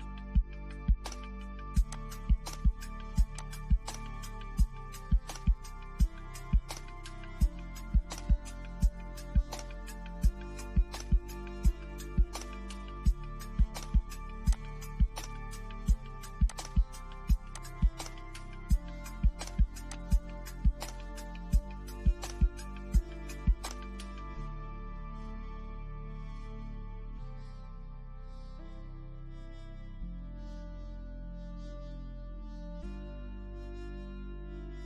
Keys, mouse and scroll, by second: 0.9 click, 3.1-5.0 shift+middle drag, 5.0 scroll up 1, 6.0-8.0 shift+middle drag, 8.0 scroll down 1, 8.3-13.4 shift+middle drag, 13.4 click, 15.0 scroll down 1, 15.4 click, 16.1 scroll down 1, 16.4 click, 18.3 scroll up 1, 18.8-20.8 drag, 20.8-21.6 scroll down 1, 22.6 click, 23.7 scroll down 1, 25.2 scroll up 1, 28.8 click, 29.4 scroll down 1, 32.1 click.